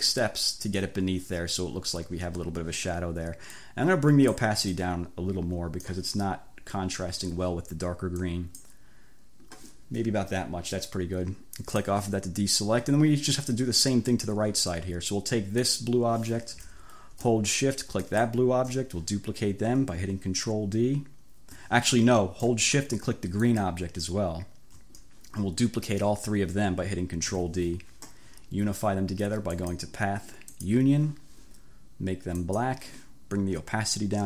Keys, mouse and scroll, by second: 3.6-4.6 drag, 4.8-6.1 drag, 8.3 click, 11.8 click, 15.7 click, 18.1 shift+click, 23.4 shift+click, 27.4 ctrl+d, 29.6 click, 30.6-31.0 scroll up 2, 32.5 click, 34.0-34.2 drag.